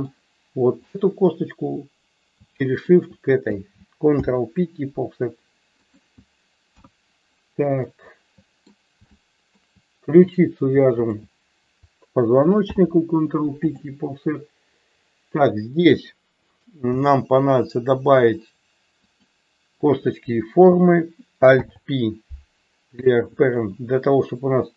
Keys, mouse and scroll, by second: 0.8 click, 2.8 shift+click, 4.2 ctrl+p, 6.8 KP_1, 7.9 ctrl+middle click, 9.2 shift+middle click, 10.3 click, 10.9 shift+click, 12.6 ctrl+p, 17.0 e, 19.0 click, 19.8 click, 21.7 alt+p.